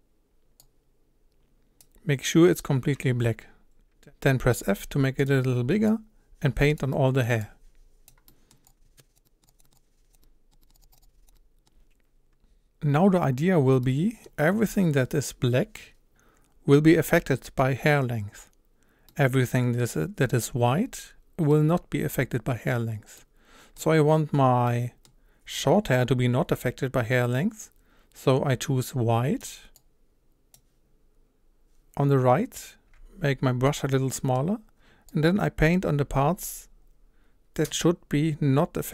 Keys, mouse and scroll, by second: 0.6-4.6 drag, 4.6 f, 5.9-6.9 drag, 6.9-7.4 middle drag, 7.4-8.3 drag, 8.3-8.6 middle drag, 8.6 click, 9.2 middle click, 9.4 click, 9.5 scroll down 1, 9.6 scroll up 1, 9.7 click, 10.1 middle click, 10.8 click, 11.3-23.9 middle drag, 23.9-24.7 scroll up 1, 24.7-29.8 middle drag, 29.8-32.9 drag, 32.9 f, 34.1-35.1 middle drag, 35.1-38.3 drag.